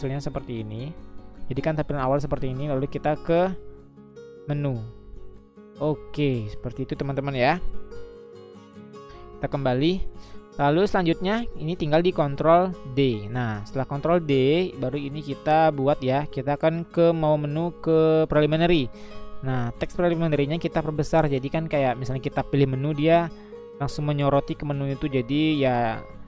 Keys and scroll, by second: 8.9 Escape, 12.8 ctrl+d.